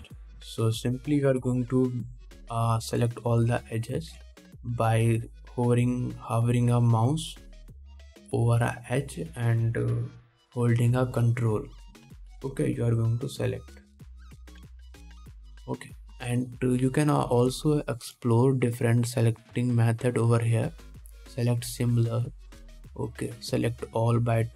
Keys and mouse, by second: 0.7 Tab, 1.2 2, 5.3 alt+a, 12.4 alt+middle click, 15.8 KP_1.